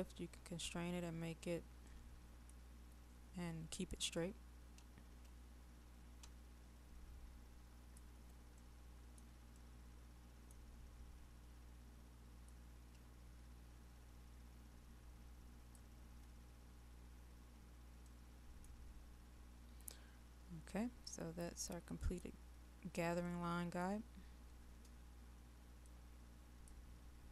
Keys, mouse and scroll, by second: 0.0 middle click, 1.4-1.8 scroll up 1, 1.8-2.9 middle drag, 4.2-8.1 drag, 8.7-10.9 middle drag, 12.5-15.7 drag, 16.5-18.1 scroll up 1, 18.1 middle click, 18.7-21.6 scroll down 1, 21.6 middle click, 22.6-23.3 scroll down 1, 23.3 middle click, 24.2-25.8 scroll down 1, 25.8 click, 27.2-27.3 scroll up 1.